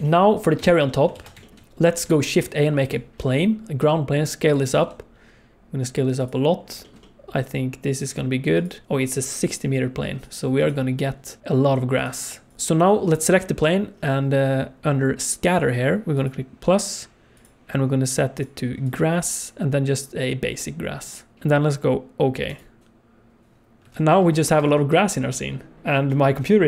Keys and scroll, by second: 1.1 ctrl+s, 2.2 shift+a, 3.7 s, 4.8 s, 8.0 s, 12.5 alt+a, 24.0 alt+a, 24.5 ctrl+s.